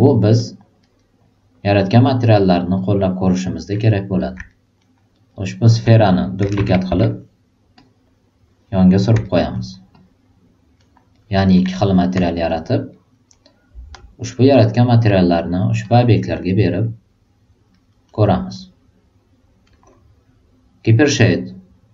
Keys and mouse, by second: 0.0 alt+right click, 1.1 alt+click, 1.6 alt+right click, 2.0 alt+middle click, 2.4 alt+right click, 2.7-3.4 alt+drag, 3.7 drag, 4.1 click, 4.5 alt+right click, 5.0 alt+right click, 6.8 w, 7.7-8.3 drag, 9.2 alt+right drag, 9.5 alt+middle click, 9.9-10.5 alt+drag, 10.7 alt+middle click, 11.1 alt+right drag, 11.7 alt+click, 12.4 alt+middle click, 12.9 alt+right drag, 13.3 alt+middle click, 13.9-14.5 alt+drag, 15.3 alt+click, 15.8 drag, 16.4 alt+right click, 16.8 alt+click, 17.7 alt+right drag, 18.0 alt+middle click.